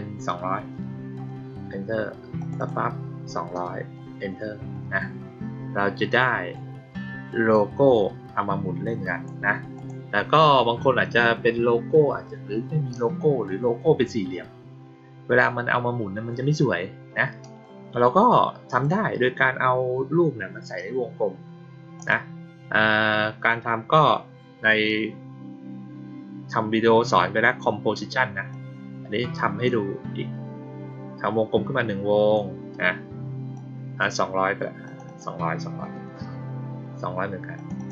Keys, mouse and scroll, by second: 2.3 click, 2.5 click, 6.2-6.5 drag, 7.4-9.2 drag, 9.7 click, 18.6 click, 21.9 click, 28.4-32.3 drag, 33.5 click, 34.8 click, 35.0 click, 37.5 click, 37.7 click.